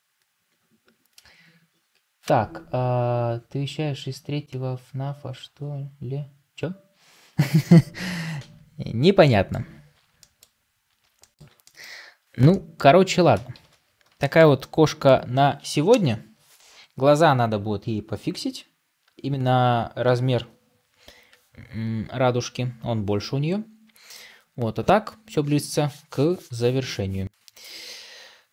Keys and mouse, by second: 9.1-9.5 middle drag, 10.0-10.7 middle drag, 11.0 shift+middle click, 11.5-12.2 middle drag, 12.3-12.7 shift+middle drag, 14.0 middle click, 14.4-28.5 middle drag.